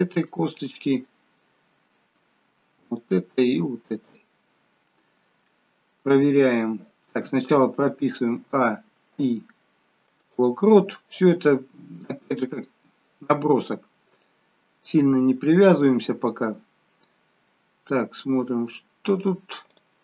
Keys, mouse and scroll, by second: 0.3 middle click, 1.4 middle click, 2.8 shift+click, 4.4 shift+click, 8.5-9.3 a, 9.3 i, 14.6 click, 19.8 click.